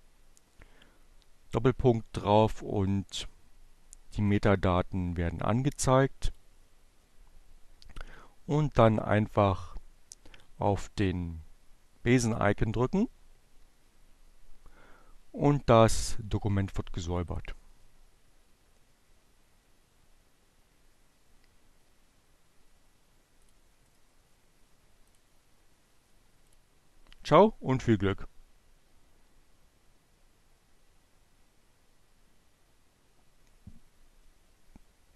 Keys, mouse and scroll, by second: 3.1-4.5 drag, 5.3 click, 9.6-11.7 drag, 14.8-16.7 drag, 22.2 click, 24.1 click, 25.6 click.